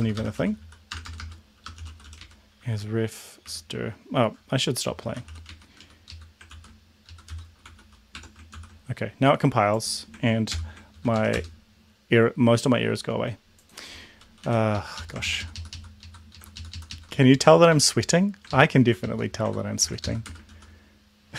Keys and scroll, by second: 0.0-2.6 typing, 2.7 Delete, 3.5 Delete, 4.7-5.8 typing, 6.1 Left, 6.5 ctrl+s, 7.0-8.3 typing, 8.5 ctrl+s, 10.5 ctrl+l, 11.1 ctrl+Up, 11.3 Return, 14.5 End, 14.8 Left, 15.0 Left, 16.5 shift+Left, 17.3 Delete, 17.7 BackSpace, 18.1 Delete, 18.5 ctrl+Left, 19.0 ctrl+Left, 19.8 ctrl+Left, 20.0 ctrl+Left, 20.3 BackSpace, 20.5 ctrl+s.